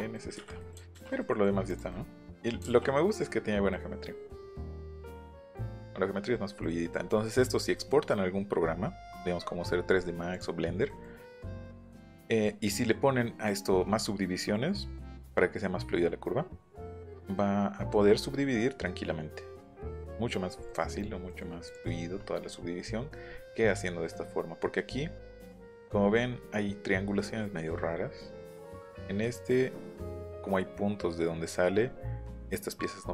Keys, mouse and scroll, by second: 0.1 middle click, 1.2 middle click, 1.6 click, 1.9 middle click, 2.7 ctrl+b, 2.8 middle click, 3.1 middle click, 3.7-5.0 middle drag, 5.0-5.5 scroll up 2, 5.6 middle click, 7.8 middle click, 10.3 click, 10.9 middle click, 11.2 scroll up 1, 11.3 middle click, 12.7 middle click, 14.4 middle click, 18.6 middle click, 20.6 middle click, 21.2 middle click, 21.6 click, 24.1 middle click, 25.0 scroll down 1, 25.6 middle click, 25.8-26.2 scroll up 1, 27.4 middle click, 29.0 middle click, 29.6 middle click, 31.6 middle click, 31.8 middle click.